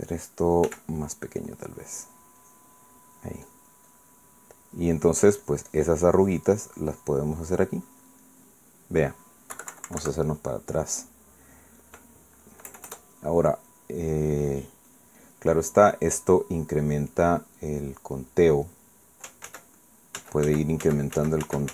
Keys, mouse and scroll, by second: 0.4 ctrl+z, 1.7 f, 2.4 click, 2.9 click, 4.2-5.3 drag, 5.6-8.3 drag, 8.6 click, 9.2-10.2 middle drag, 10.5 KP_Subtract, 11.2 middle click, 13.7 KP_Add, 14.7-16.5 drag, 17.4-18.7 drag, 18.8 click, 20.4 ctrl+z, 21.2 ctrl+z.